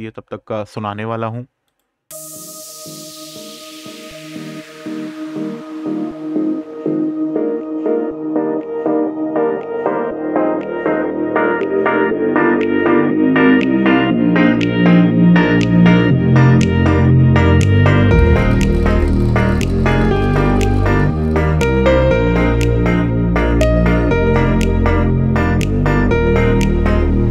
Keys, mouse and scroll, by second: 1.4 click, 12.3 click, 16.1 click, 20.6 scroll down 1, 22.5 scroll up 1.